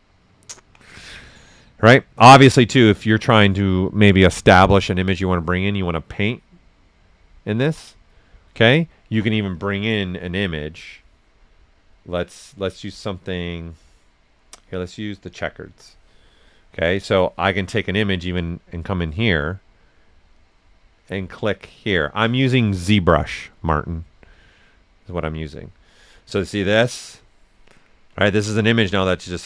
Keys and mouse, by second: 9.5 ctrl+click, 15.3-29.4 ctrl+drag.